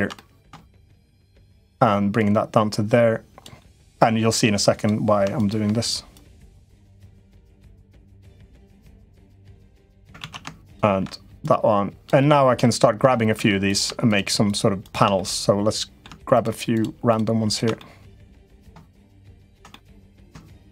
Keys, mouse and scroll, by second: 0.7 shift+click, 1.2 shift+click, 1.9-3.2 drag, 3.3 middle click, 4.5 click, 5.9 click, 8.2-9.8 drag, 10.0 ctrl+z, 10.5 click, 11.2 click, 12.1 middle click, 13.2 3, 13.4 click, 14.2 shift+click, 14.6 shift+click, 14.9 middle click, 17.3 shift+click, 17.5-18.9 middle drag, 18.8 shift+click, 19.0 shift+click, 19.4 middle click, 20.4 shift+click, 20.6 middle click.